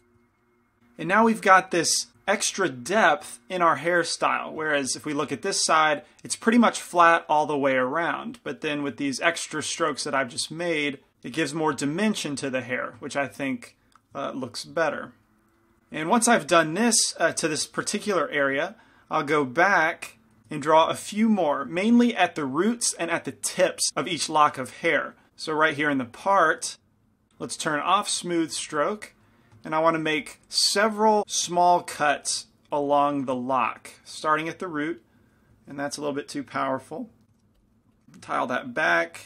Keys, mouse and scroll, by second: 0.3-2.1 middle drag, 2.5 middle click, 19.7 f, 19.9 click, 20.3 middle click, 20.4 shift+f, 21.0-22.9 drag, 21.1-22.9 middle drag, 25.8-30.4 drag, 29.4-31.2 middle drag, 30.2 f, 31.2 shift+f, 31.6 shift+f, 32.5 f, 33.2-34.8 middle drag, 34.0-37.1 drag, 37.1 ctrl+z, 37.4 shift+f, 38.7-39.2 drag.